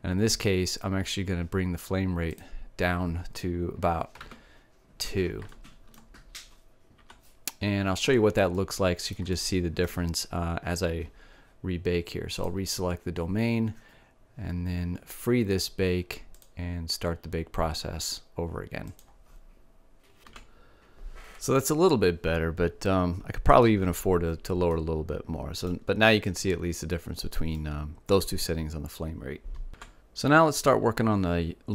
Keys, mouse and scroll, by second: 1.2 middle click, 3.5-5.5 drag, 6.7-8.0 middle drag, 9.6-12.8 middle drag, 13.5-15.0 right drag, 15.6 middle click, 17.4-19.2 drag, 19.2 middle click, 19.9-21.5 drag, 21.5-26.1 middle drag, 26.3-29.2 middle drag.